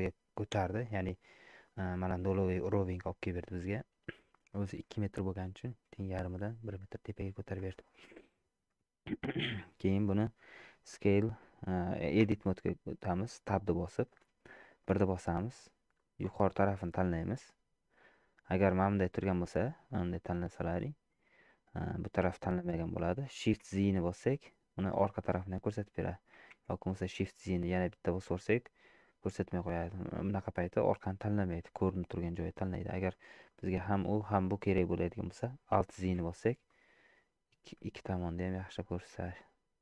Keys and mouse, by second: 0.5 KP_1, 1.7 shift+middle click, 2.4 shift+middle click, 3.6 middle click, 4.7 shift+middle click, 5.6 middle click, 6.8 middle click, 7.4 shift+middle click, 12.2 Tab, 13.8 shift+middle click, 14.9 1, 16.0-17.1 drag, 18.5 middle click, 19.7 click, 20.8 middle click, 23.6 shift+z, 24.3-25.9 middle drag, 27.5-30.1 middle drag, 30.4 click, 31.2-32.9 middle drag, 33.5 middle click, 35.0 middle click, 36.0 alt+z, 36.7-39.6 middle drag.